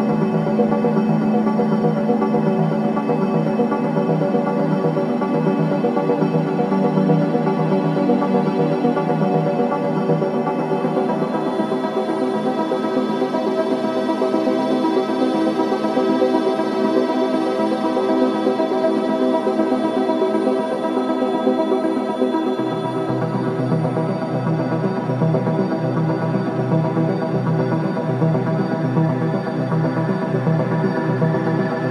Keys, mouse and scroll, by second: 2.3 click, 14.0 scroll up 1, 16.3 scroll down 1, 19.1-20.9 typing, 22.2 click, 27.4 scroll down 1, 29.0 scroll up 1, 29.7 scroll down 1, 30.3 scroll up 1.